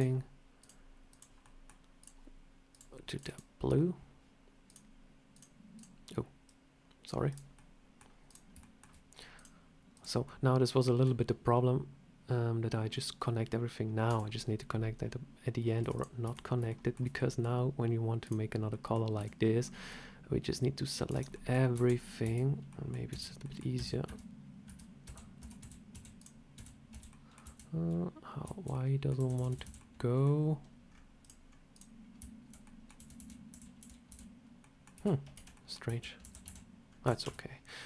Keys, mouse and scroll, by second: 0.5 click, 1.3 middle click, 1.9 click, 2.6 click, 3.2 click, 4.6 click, 5.6 click, 7.2 click, 7.4 middle click, 8.1 click, 8.5 shift+middle click, 9.3 click, 10.1 middle click, 13.6 scroll down 1, 14.0 Tab, 15.7 Tab, 15.8 click, 16.1 Tab, 16.3 scroll up 1, 16.6 shift+middle click, 17.1 middle click, 18.1 click, 18.6 middle click, 19.1 c, 21.2 middle click, 21.6 \, 22.1 \, 22.6 middle click, 23.0 \, 23.3 middle click, 23.6 \, 23.9 Tab, 24.6 Tab, 24.9-27.3 typing, 25.3 Tab, 26.1 click, 27.0 middle click, 28.4 \, 28.6 middle click, 29.1-29.5 \, 29.7 middle click, 30.8-31.2 scroll down 4, 31.1 click, 31.4 scroll up 2, 31.6 click, 32.1-34.0 typing, 32.5 middle click, 34.5 middle click, 34.8 Tab, 35.2-36.9 typing, 35.4 middle click, 36.8 scroll up 2, 37.1 Tab, 37.5 scroll up 1, 37.5 middle click.